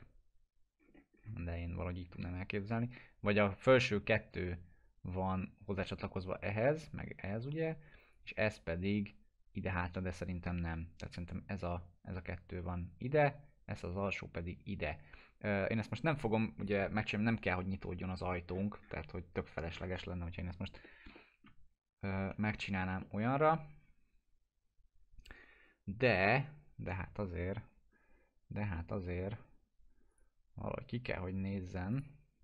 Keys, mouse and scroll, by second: 0.8-1.1 scroll up 1, 15.9-16.8 drag, 18.5 scroll up 1, 20.8 middle click, 21.1 alt+middle click, 22.3 F4, 23.0 alt+middle click, 28.4-29.3 alt+middle drag, 30.1 click.